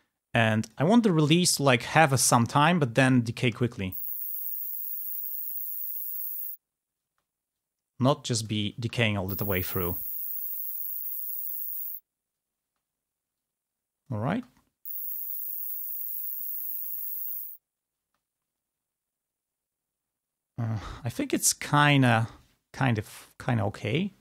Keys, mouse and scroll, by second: 1.5-3.1 drag, 3.7 space, 7.4 space, 7.6-8.8 drag, 8.8 space, 13.0 space, 13.4-14.6 drag, 14.6 space, 15.9 2, 18.2 space, 21.2 click.